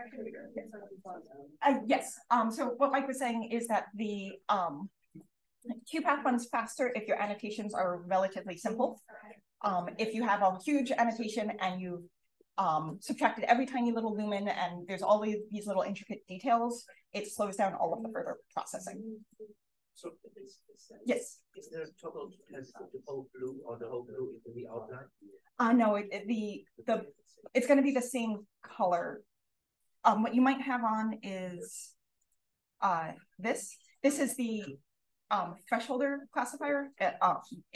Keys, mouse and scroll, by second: 31.6 click.